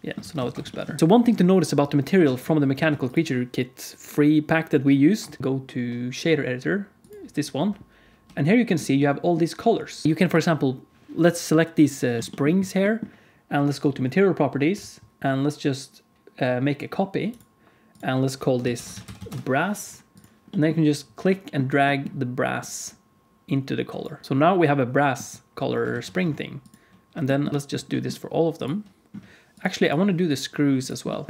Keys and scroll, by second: 0.1 alt+a, 0.4 ctrl+s, 2.2 alt+a, 2.9 ctrl+s, 8.2 n, 10.0 ctrl+s, 10.0 alt+a, 19.1 s, 24.2 ctrl+s, 24.2 alt+shift+z, 25.8 alt+shift+z.